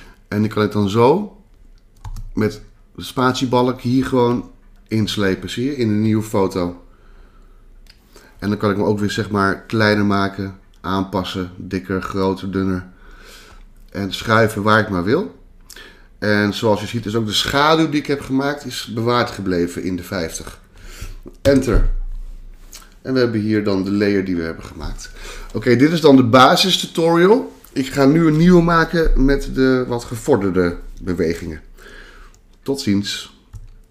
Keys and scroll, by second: 21.4 Return.